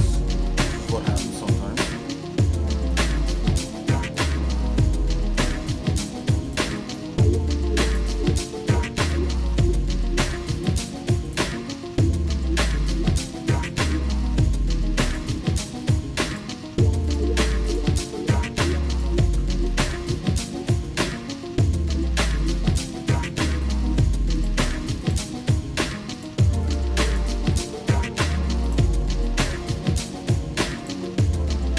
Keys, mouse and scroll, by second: 0.0 ctrl+shift+click, 0.7-1.8 shift+middle drag, 2.1 shift+middle click, 2.9 shift+click, 3.5 shift+middle click, 4.2 shift+click, 5.4 ctrl+shift+click, 6.5 shift+click, 7.0 shift+middle click, 7.9 shift+click, 8.2 shift+middle click, 9.0 ctrl+shift+click, 9.5 shift+middle click, 10.5 shift+click, 11.2 ctrl+shift+click, 11.7 middle click, 12.3 shift+middle click, 12.8 middle click, 13.6 shift+click, 14.0 shift+middle click, 15.1 ctrl+shift+click, 15.6 middle click, 16.3 ctrl+shift+click, 17.7 ctrl+shift+click, 18.3 shift+middle click, 18.9 ctrl+shift+click, 19.5 scroll down 2, 19.8 shift+middle click, 21.0 middle click, 21.4 shift+middle click, 21.9 scroll up 1, 22.5 scroll up 1, 22.7 shift+click, 23.3 shift+click, 24.5 shift+click, 25.2 shift+click, 25.6 shift+middle click, 26.1 shift+click, 26.7 shift+click, 27.1 shift+click, 27.9 shift+middle click, 28.6 shift+click, 29.3 shift+click, 29.7 shift+middle click, 30.8 ctrl+shift+click.